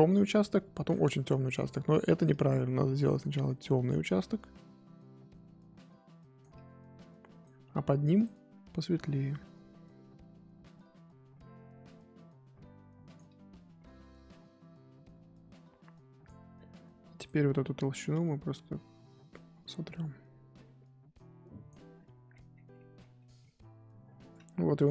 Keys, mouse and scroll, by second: 0.0-2.3 scroll up 1, 2.3 click, 3.4-6.4 drag, 6.5-8.2 drag, 9.3-12.3 drag, 13.2-16.3 drag, 17.2 click, 18.1-21.9 drag, 21.9-22.3 scroll up 6, 22.3-22.7 scroll down 16, 22.7-24.0 middle drag, 24.0-24.9 scroll up 2.